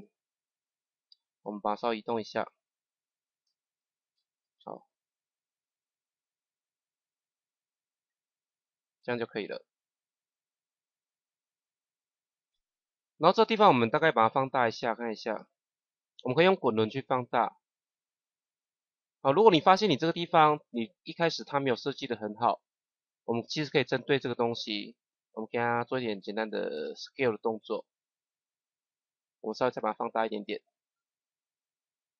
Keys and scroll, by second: 1.0 shift+Down, 3.7 shift+Up, 4.1 shift+Down, 27.2 s.